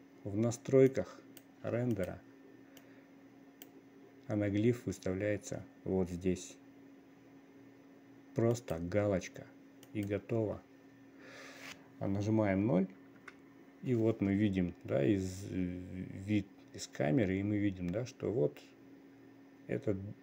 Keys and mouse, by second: 10.5 click, 12.7 click, 13.3 click, 13.9 click, 14.3 click, 14.7 click, 16.7-17.6 drag, 17.9 middle click, 18.1-20.2 middle drag.